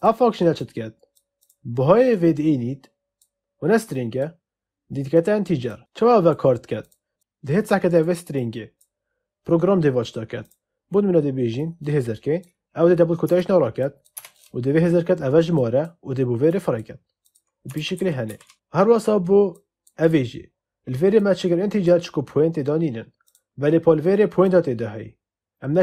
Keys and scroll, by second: 13.2 BackSpace, 17.7 ctrl+z.